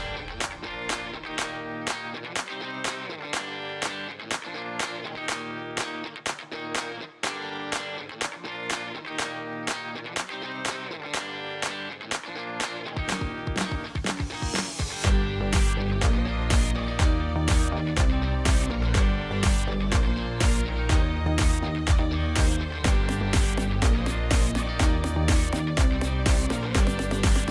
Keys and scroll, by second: 2.8 e, 3.4 Return, 4.4-5.7 typing, 8.0 Tab, 9.4-9.9 typing, 11.2 ctrl+c, 12.0 x, 12.2 ctrl+v, 13.1 ctrl+c, 13.8 g, 14.8 Tab, 16.0 x, 19.8-20.4 typing, 20.6 Return, 24.8 5, 24.9 Return, 27.2 ctrl+c, 27.4 Tab.